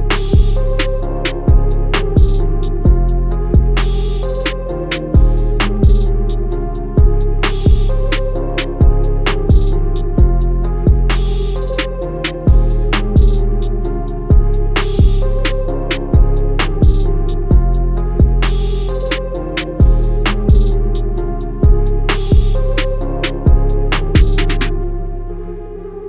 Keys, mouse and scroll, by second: 0.2 click, 1.8 i, 3.7 click, 4.0 a, 5.4 click, 5.8 i, 6.9 click, 7.1 a, 8.1 click, 8.4 i, 9.6 click, 10.0 a, 10.7 click, 11.0 i, 12.3 click, 12.6 a, 13.4 click, 14.5 |, 15.0 click, 15.2 a, 16.4 ctrl+z, 19.3 l, 19.8 click, 20.1 a, 21.3 ctrl+z, 22.0 click, 24.6 |, 25.2 click.